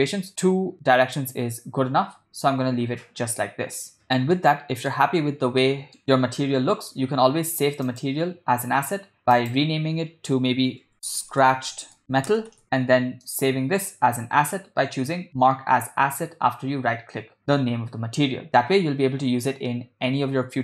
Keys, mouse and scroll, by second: 3.4 ctrl+middle click, 4.4-5.0 shift+middle drag, 5.6-6.0 ctrl+middle drag, 6.4 ctrl+middle click, 8.0 click, 9.4-12.6 drag, 13.5-20.6 right drag.